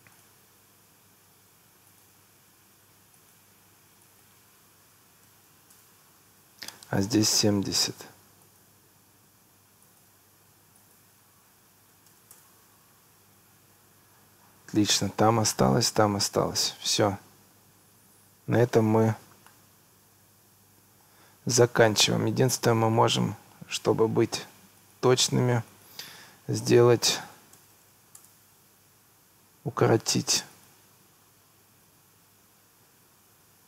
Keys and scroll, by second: 5.3 2, 5.8 Return, 11.9 7, 12.1 0, 12.4 Return, 27.4 9, 27.6 0, 28.2 Return, 31.9 9.